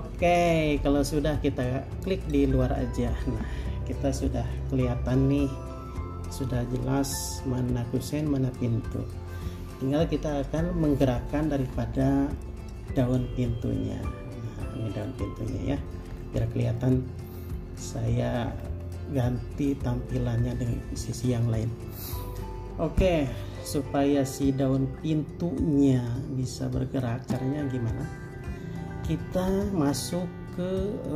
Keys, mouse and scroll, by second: 12.6 middle click, 16.4-17.0 scroll down 1, 17.0 middle click, 17.7 scroll down 1, 18.4 scroll up 1, 19.4 middle click, 20.3-23.3 scroll up 1.